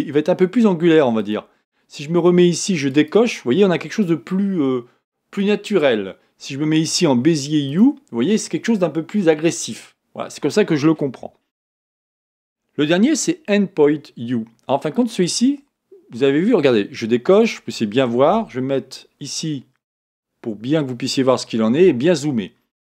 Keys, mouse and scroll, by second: 2.9-5.6 drag, 7.7-10.7 drag, 11.8 click, 14.8 click, 17.4 click, 18.8-21.8 middle drag.